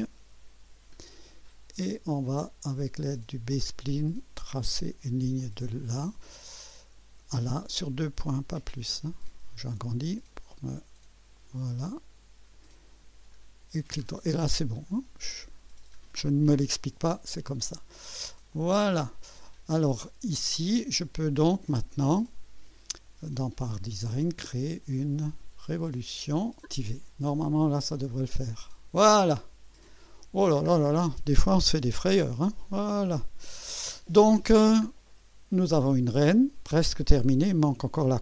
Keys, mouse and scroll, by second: 0.7 Delete, 1.2 scroll down 1, 3.5 click, 5.4 click, 6.4 right click, 9.4 scroll up 2, 11.4 click, 13.3 right click, 14.0 scroll down 2, 14.8 right click, 15.6-16.0 scroll down 2, 18.5 click, 19.8-20.4 right drag, 22.3 click, 23.4 click, 25.2 click, 28.1 click, 29.9 click, 30.7 scroll up 1, 31.0 scroll down 1, 31.9 2, 32.7-33.6 right drag, 34.5 scroll down 1, 35.1-35.8 right drag.